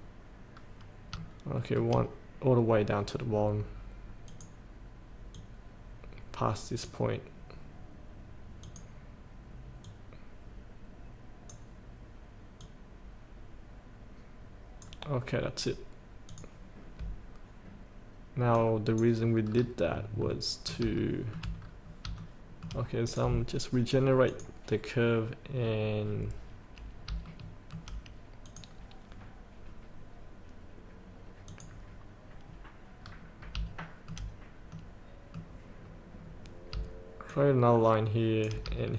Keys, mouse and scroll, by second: 1.3 shift+middle click, 4.5-15.1 drag, 19.7 scroll up 1, 20.3 middle click, 21.2 shift+middle click, 21.7 scroll up 1, 22.4 shift+middle click, 23.3-24.3 drag, 25.7 scroll down 1, 27.4 shift+middle click, 28.6 click, 31.7 click, 32.6 scroll down 1, 33.2 scroll up 1, 34.1 shift+middle click, 34.9 middle click, 35.9 scroll down 1, 37.4-38.6 shift+drag.